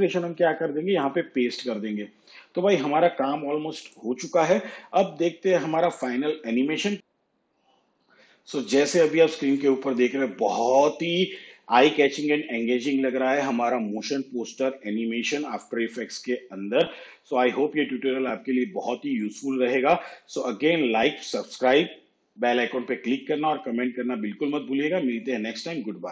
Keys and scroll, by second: 0.1 ctrl+v.